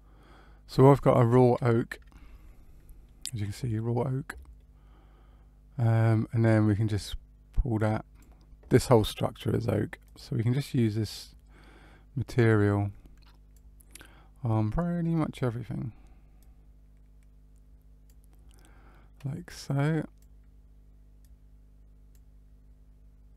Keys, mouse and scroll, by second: 1.8 middle click, 4.5 middle click, 6.9 click, 12.4 click, 14.4 click, 16.3 click, 19.3 click, 21.1 click.